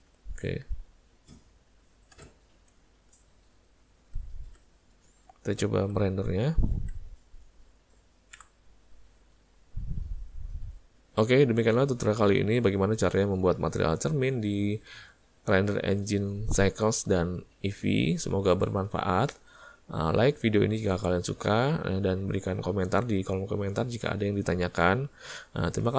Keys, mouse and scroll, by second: 0.3 ctrl+middle click, 0.6 middle click, 0.8 middle click, 1.3 middle click, 2.2 /, 3.1 z.